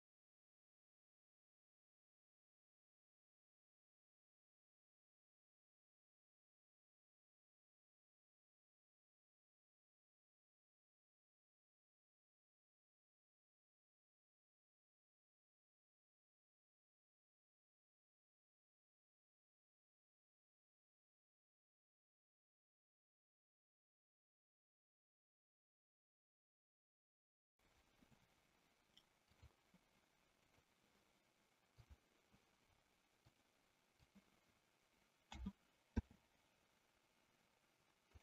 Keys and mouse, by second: 0.2 click, 0.8 middle click, 1.6 middle click, 2.8 middle click, 3.3 middle click, 3.6 middle click, 4.2 middle click, 4.6 middle click, 4.9 click, 5.4 middle click, 5.9 middle click, 6.5 middle click, 6.9 click, 7.7 click, 8.4 middle click, 8.9 click, 9.5 middle click, 9.9 click, 10.1 middle click, 10.3 middle click, 10.6 middle click, 11.1 middle click, 11.7 click, 12.2 click, 13.2 click, 13.9 click, 14.3 click, 14.7 click, 15.1 click, 15.3 click, 16.0 click, 17.5 click, 18.1 click, 18.6 click, 21.3 click, 21.7 click, 22.6 click, 22.9 click, 23.3 click, 23.5 click, 23.8 middle click, 24.4 click, 25.3 middle click, 25.9-26.5 middle drag, 26.7 shift+middle click, 29.2 click, 30.4 click, 33.3 click.